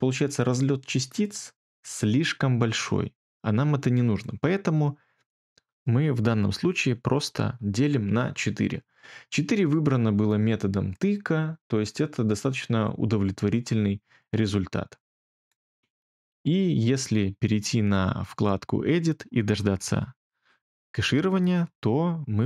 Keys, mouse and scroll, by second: 6.9-7.8 typing.